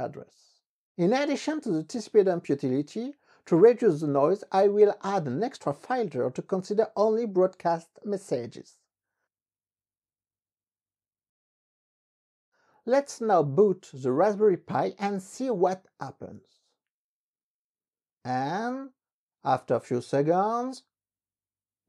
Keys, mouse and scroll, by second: 1.4-5.3 typing, 5.6 Return.